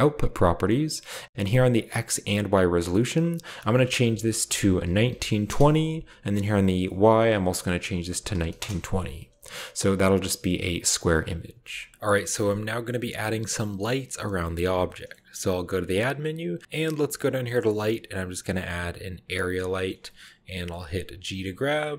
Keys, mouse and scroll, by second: 0.0 click, 3.4 click, 3.7 click, 4.6-5.1 typing, 5.4 Return, 6.5 click, 7.8-8.2 typing, 8.5 Return, 11.9-12.7 middle drag, 11.9-13.3 scroll down 1, 13.9-14.6 middle drag, 14.6-15.4 scroll down 1, 14.8-15.6 middle drag, 15.5 shift+a, 19.2-20.2 drag, 19.7 shift+middle click, 21.3 g.